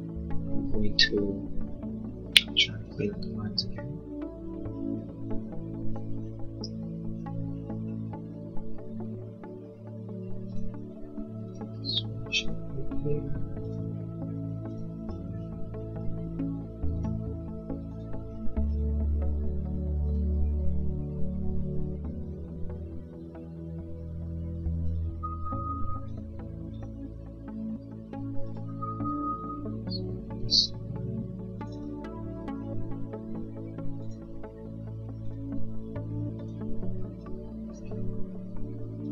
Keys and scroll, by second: 29.2 Escape.